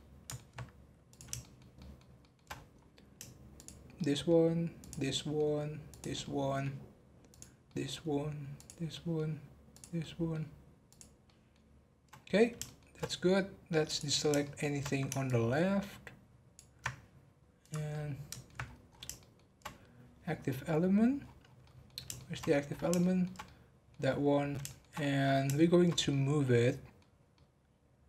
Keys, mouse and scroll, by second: 1.0 click, 1.4-2.5 shift+middle drag, 2.5-3.0 scroll up 5, 3.5 shift+click, 3.9 shift+middle click, 4.8 shift+click, 5.1 shift+middle click, 5.9 shift+click, 6.2-7.3 shift+middle drag, 7.3 shift+click, 7.6 shift+middle click, 8.5 shift+click, 8.9 shift+middle click, 9.7 shift+click, 10.0 shift+middle click, 10.8 shift+click, 11.2 shift+middle click, 12.1 scroll down 1, 12.6-13.8 shift+middle drag, 13.8 click, 14.4 shift+middle click, 15.3 ctrl+click, 17.6 click, 17.9 middle click, 18.6 scroll up 2, 19.1-21.2 shift+middle drag, 21.2-21.6 scroll down 10, 21.6 middle click, 22.4-22.9 scroll up 10, 23.0-24.1 shift+middle drag, 24.1-24.6 scroll down 4, 24.6 shift+middle click, 24.9-25.5 scroll up 7, 25.5-28.0 shift+middle drag.